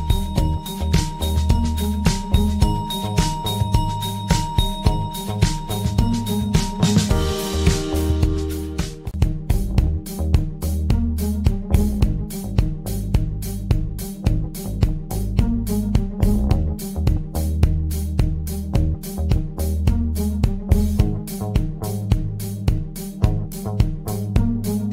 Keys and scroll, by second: 7.5 ctrl+z.